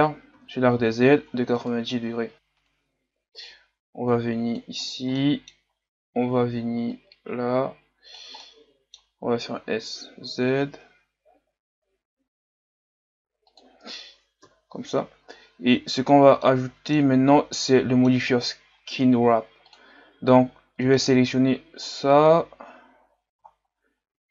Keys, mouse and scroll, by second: 0.3 r, 3.5-4.9 drag, 4.9 scroll down 3, 5.2 middle click, 5.6-6.7 scroll up 1, 6.7-7.0 scroll up 1, 7.0-8.5 drag, 8.5 middle click, 9.4 s, 14.4 KP_3, 15.2-15.8 scroll up 2, 15.8 Tab, 16.1 scroll down 3, 16.4-23.1 middle drag, 23.1-24.3 scroll down 2.